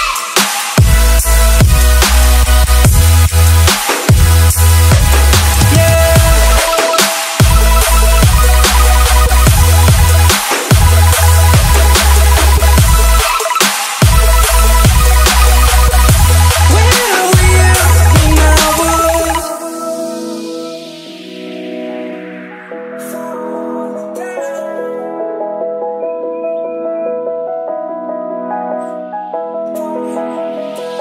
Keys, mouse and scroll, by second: 3.3-6.0 typing, 7.3 Return, 9.0 click, 12.6 F10, 13.4 click, 14.0-15.2 typing, 15.7-17.0 drag, 18.0-19.3 typing, 19.7 right click, 20.6 click, 24.0 BackSpace, 25.0 shift+0, 25.5 Return, 26.5-28.0 drag, 29.1 KP_5, 30.7 Return.